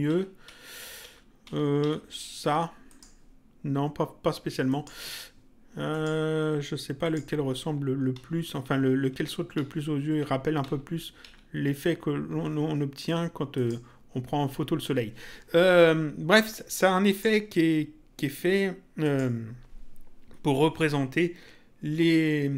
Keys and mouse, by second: 1.8 Down, 4.6 click, 5.9 click, 7.6 Up, 11.2 Down, 13.5 click, 17.0 click, 18.9 click.